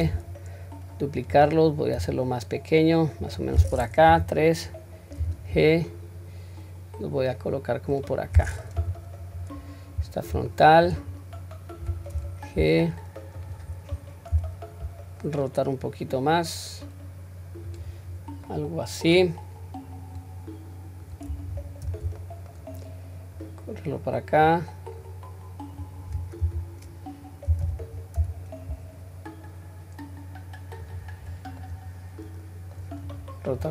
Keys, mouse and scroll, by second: 1.9 s, 4.1 KP_3, 5.2 g, 8.8 KP_1, 9.4-10.1 scroll up 1, 10.5 shift+middle click, 11.1-11.8 scroll up 1, 12.1 g, 18.2-18.5 scroll down 1, 18.5-19.1 middle drag, 20.2-21.2 drag, 21.9 ctrl+z, 22.2 middle click, 23.4 click, 25.0 click, 26.4 r, 31.3-31.7 scroll down 2, 31.7-32.8 middle drag, 33.1 click, 33.6-33.7 scroll down 2.